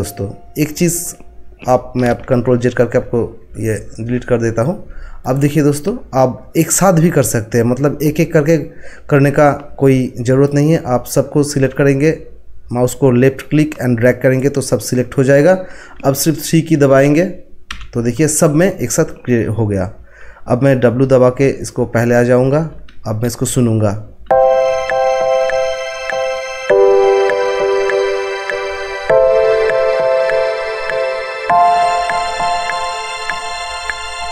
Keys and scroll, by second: 2.3 ctrl+z, 17.7 3, 22.5 w.